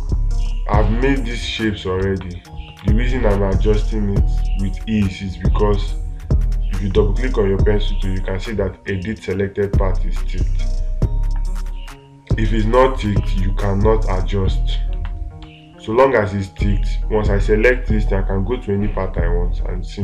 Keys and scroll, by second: 0.1 space, 3.2 space, 15.8 space.